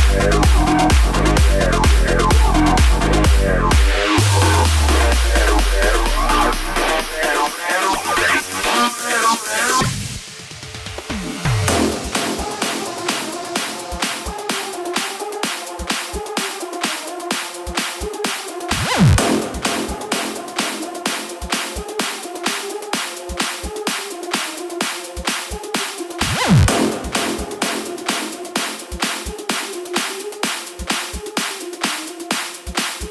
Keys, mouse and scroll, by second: 22.4 click, 29.7 space.